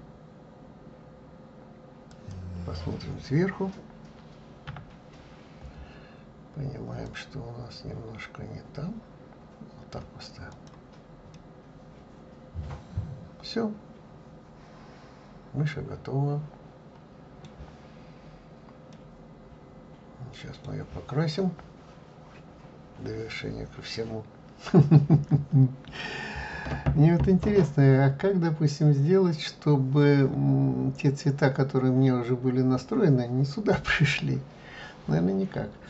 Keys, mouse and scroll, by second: 4.9 KP_7, 7.4-10.4 drag, 10.8 click, 11.6-14.6 middle drag, 19.2-22.2 middle drag.